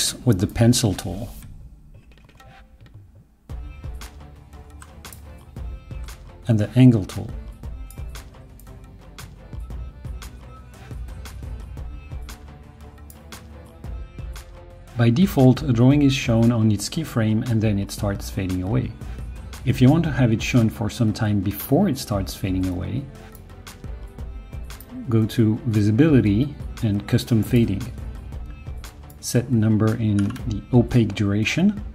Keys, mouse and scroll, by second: 0.3-4.8 drag, 6.0-7.9 shift+drag, 8.6-13.0 shift+drag.